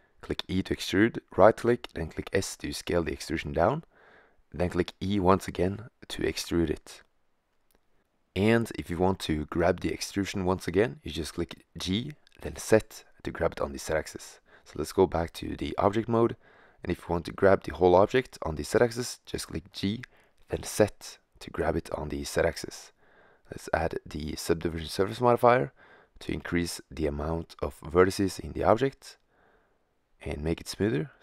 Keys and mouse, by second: 0.0 e, 1.1 s, 3.5 click, 4.9 e, 10.6 middle click, 11.3 g, 14.1 g, 16.3 g, 21.3-23.0 drag, 23.0 middle click, 25.8-26.5 middle drag.